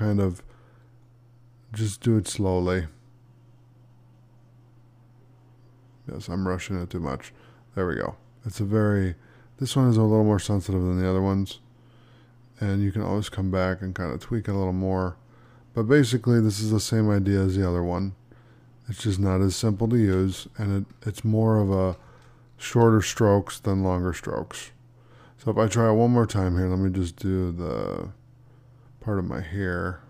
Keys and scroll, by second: 19.9 ctrl+d, 23.0 space.